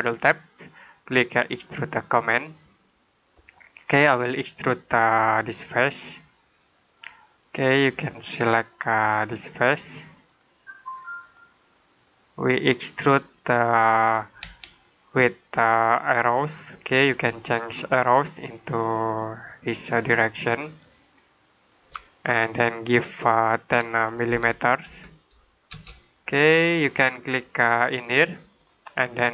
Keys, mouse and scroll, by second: 5.2 click, 13.4 middle click, 14.5 shift+middle click, 17.3 middle click, 19.3 click, 24.2-24.7 typing, 25.6 Return, 26.5 middle click, 28.8 click.